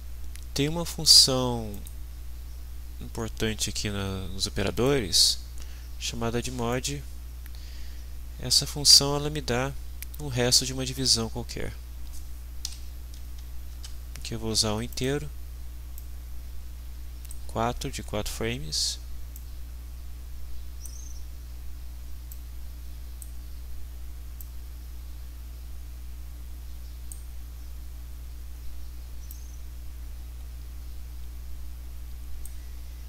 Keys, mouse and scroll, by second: 1.7 click, 4.7 click, 6.7 click, 11.0 click, 12.7 Delete, 13.2 4, 13.7 Return, 14.9 click, 16.0-17.5 drag, 19.4-21.1 drag, 22.3-23.5 drag, 24.4-27.3 drag, 29.3-32.6 drag.